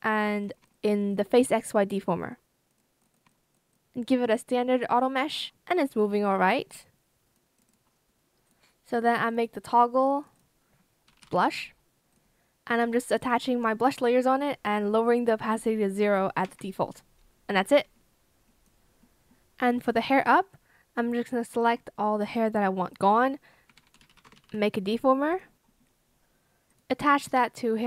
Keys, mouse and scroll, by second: 0.6 shift+click, 1.6 shift+click, 3.6 shift+click, 5.1 Escape, 10.8-11.7 typing, 12.8 shift+click, 16.3 Escape, 19.2 Escape, 21.5 shift+click, 23.6-25.9 typing.